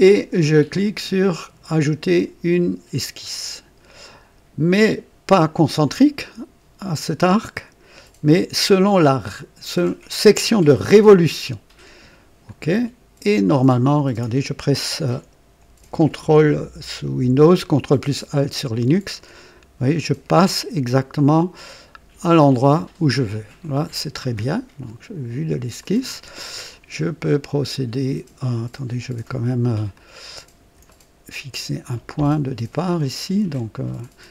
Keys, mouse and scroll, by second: 3.3 click, 7.5 click, 10.9 click, 12.5 click, 18.4-20.2 ctrl+alt+drag, 25.8 click, 26.5-27.0 scroll up 1, 27.2-28.6 right drag, 29.9 ctrl+alt+click, 30.9 right click.